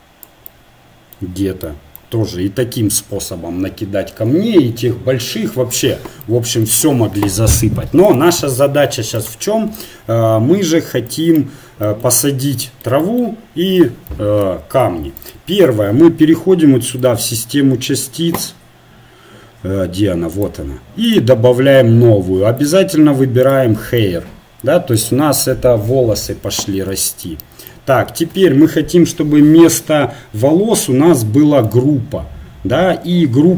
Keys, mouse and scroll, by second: 8.1 e, 8.4 right click, 11.5-12.9 middle drag, 15.3-18.9 drag, 18.9-21.2 right drag, 21.2 click, 21.7-24.5 right drag, 24.3 click, 24.5-26.1 middle drag, 31.7-33.5 drag.